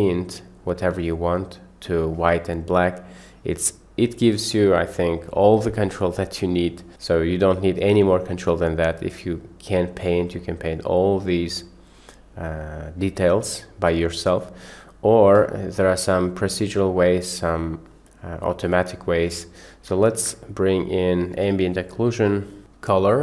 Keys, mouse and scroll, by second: 2.8 middle click, 7.4-8.7 middle drag, 10.4 middle click, 16.2 click, 20.1 shift+a.